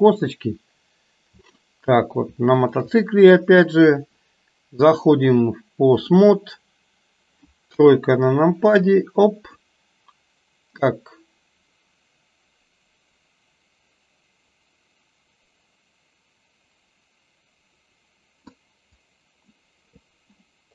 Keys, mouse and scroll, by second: 1.5-2.1 middle drag, 2.5 shift+click, 5.2-6.2 drag, 7.8 KP_1, 9.0 click, 11.0-18.6 drag, 19.1 click.